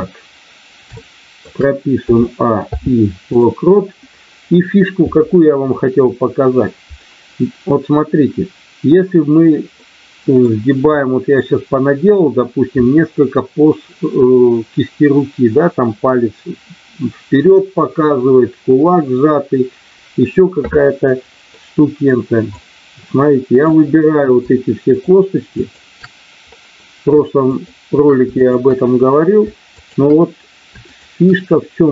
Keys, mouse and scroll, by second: 0.9 shift+middle click, 1.9 a, 2.5 i, 9.8 middle click, 10.9 middle click, 21.5 middle click, 22.5-23.6 drag, 25.0 shift+click, 25.6 shift+click, 27.5 shift+click, 28.4 shift+click, 29.8 shift+click, 30.8 shift+click.